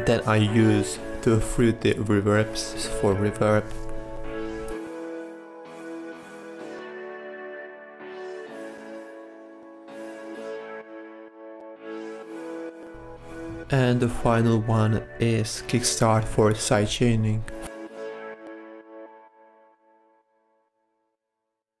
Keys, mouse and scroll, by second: 4.4-5.2 drag, 10.4-12.6 drag, 13.4 drag, 13.6-17.3 drag, 17.4 click, 18.2 click, 19.6-21.8 drag.